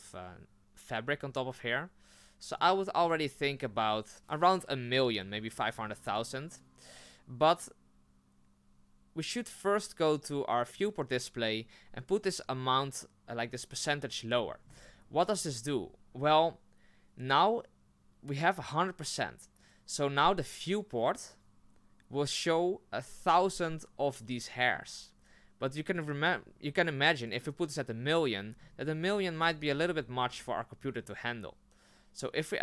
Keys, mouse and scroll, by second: 1.9-6.1 middle drag, 6.1 click, 6.1 middle click, 14.6-15.4 scroll down 4, 15.4-15.9 scroll up 4, 23.6-24.7 scroll down 4, 24.7 scroll up 2, 29.9 scroll down 4, 30.8 scroll up 4.